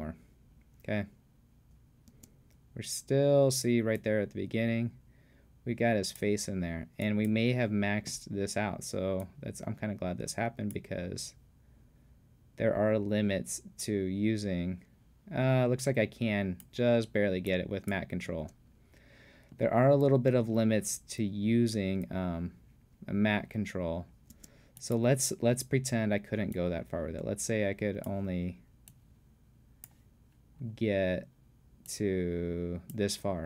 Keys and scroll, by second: 18.3 space, 24.3 space.